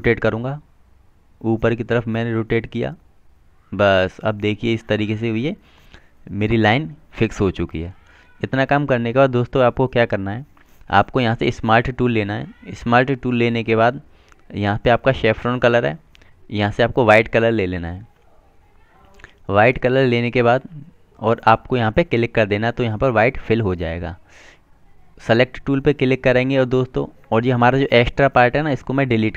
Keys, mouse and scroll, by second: 15.6 click, 18.9 click, 27.1 click.